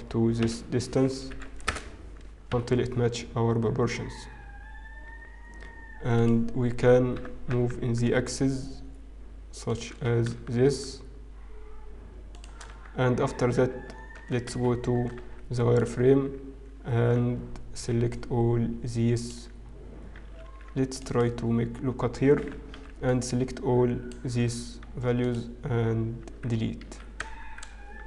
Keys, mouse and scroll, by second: 1.5 s, 1.5 KP_Decimal, 2.5 KP_Decimal, 3.9 s, 8.3 shift+g, 11.6 shift+s, 12.6 Tab, 13.7 z, 15.2 z, 17.5 alt+a, 17.9 b, 18.7 click, 18.9 click, 19.2 click, 19.7-20.5 scroll up 3, 20.5 ctrl+r, 23.7 alt+a, 23.7 b, 24.4 x, 26.2 z.